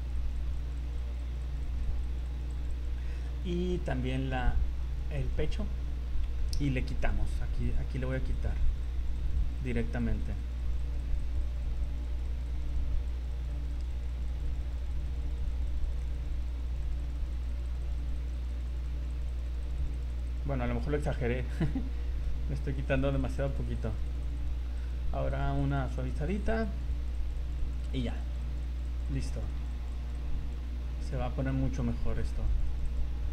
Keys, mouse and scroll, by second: 0.0 click, 0.2 click, 0.4 click, 0.6 click, 0.8 click, 1.0 click, 1.2 click, 1.4 click, 1.6 click, 1.8 click, 2.0 click, 2.2 click, 2.6 click, 2.8 click, 2.9-3.3 scroll down 7, 4.2 right click, 4.8 right click, 5.2 right click, 5.6-6.3 scroll up 8, 6.4 shift+middle click, 7.0 click, 7.9 scroll up 2, 8.1 click, 8.4 click, 8.6 click, 8.7 click, 9.0 click, 9.2 click, 9.4 click, 9.6 click, 9.8 click, 10.0 click, 10.2 click, 10.4 click, 10.6 click, 10.8 click, 11.0 click, 11.2 click, 11.4 click, 11.8 click, 12.0 click, 12.2 click, 12.4 click, 12.6 click, 12.8 click, 12.9 scroll down 3, 13.1 click, 13.4 click, 13.6 click, 13.8 click, 14.0 click, 14.2 click, 14.4 click, 14.6 click, 14.8 click, 15.0 click, 15.2 click, 15.5 click, 15.5 click, 15.7 click, 16.0-16.8 click, 16.3 click, 17.0 click, 17.2 click, 17.4 click, 17.6 click, 17.6 click, 17.9 click, 18.1 click, 18.3 click, 18.3 click, 18.5 click, 18.8 click, 19.0 click, 19.1-20.2 click, 19.3 click, 19.5 click, 19.9 click, 20.1 click, 21.5 click, 22.7 click, 23.0 click, 23.2 click, 23.5 click, 23.6 click, 23.7 click, 24.0 click, 24.2 click, 24.3 click, 24.8 click, 25.7 click, 25.9 click, 26.0 click, 26.3 click, 26.4 click, 26.8 click, 27.0 click, 27.2 click, 27.4 click, 27.8 click, 27.9 click, 28.0 click, 28.2 click, 28.4 click, 28.8 click, 29.0 click, 29.2 click, 29.4 click, 29.6 click, 29.8 click, 30.0 click, 30.2 click, 30.9-31.2 scroll down 4, 31.8 right click, 32.0-32.4 scroll up 3, 32.5 click, 32.7 click, 32.9 click, 33.1-33.3 scroll down 4.